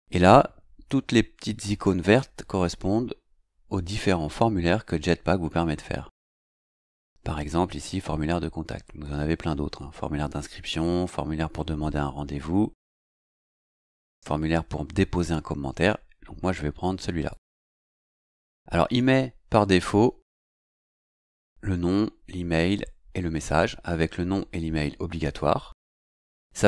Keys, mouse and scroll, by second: 17.3 click.